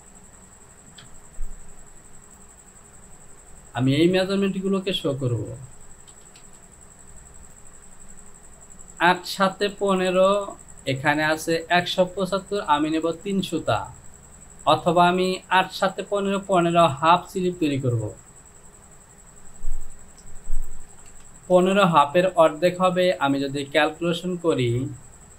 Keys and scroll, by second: 1.1 Return, 20.3 ctrl+z.